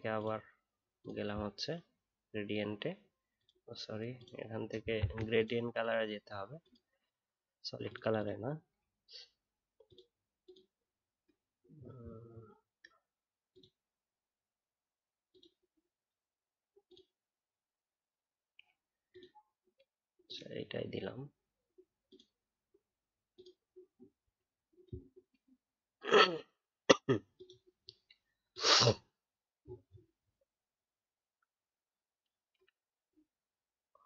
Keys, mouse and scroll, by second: 4.9 ctrl+z.